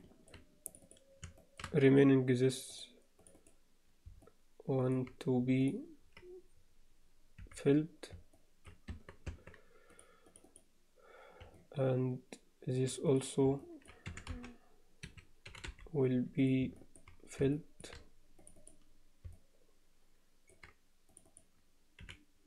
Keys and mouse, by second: 0.0 alt+middle click, 0.6 click, 1.4 alt+shift+middle click, 3.2 click, 4.2 alt+middle click, 7.4 f, 8.4 alt+middle click, 8.9 Tab, 9.3 Tab, 9.9 click, 10.2 click, 11.6-12.8 alt+middle drag, 13.0 click, 13.6 alt+middle click, 14.0 e, 15.4 g, 16.8 alt+middle click, 17.5 alt+shift+middle click, 18.6 click, 19.3-20.5 alt+middle drag, 21.3 click, 22.0 f.